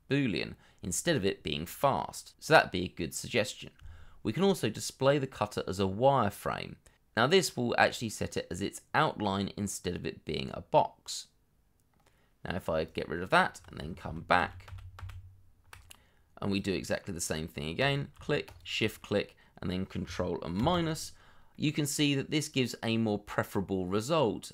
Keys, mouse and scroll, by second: 14.0 ctrl+z, 15.9 middle click, 18.4 shift+click, 19.0 middle click, 20.6 ctrl+KP_Subtract, 21.5 middle click.